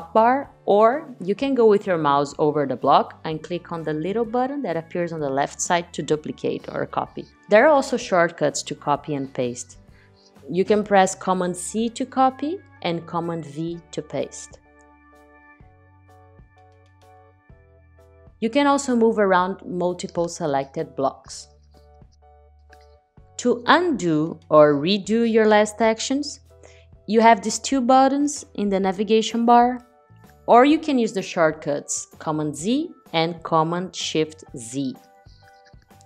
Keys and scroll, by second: 11.0 super+c, 13.5 super+v, 30.6 super+z, 33.1 shift+super+z.